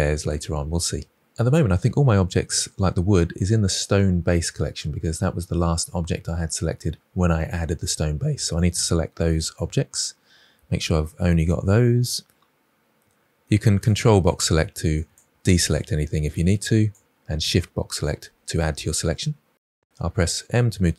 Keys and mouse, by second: 2.0 click, 16.3 shift+drag, 19.9 m.